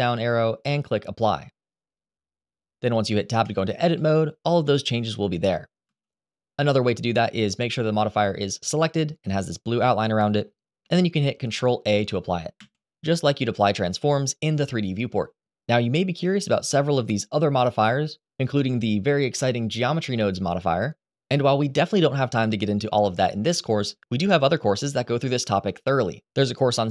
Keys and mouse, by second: 3.1 Tab, 3.7 middle click, 5.6 ctrl+z, 6.4 ctrl+z, 12.3 ctrl+a, 16.4 click, 17.2-26.9 drag.